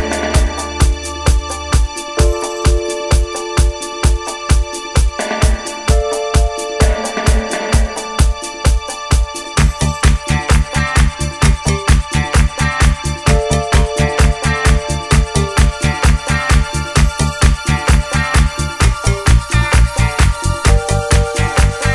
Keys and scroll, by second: 7.2 Escape, 7.3 d, 8.3 Escape, 9.2 Delete, 9.9 0, 10.1 Return, 10.8 0, 10.9 Return, 12.2 0, 12.5 Return, 13.1 5, 13.3 Return, 14.2 Escape, 14.3-17.1 typing, 15.0 Return.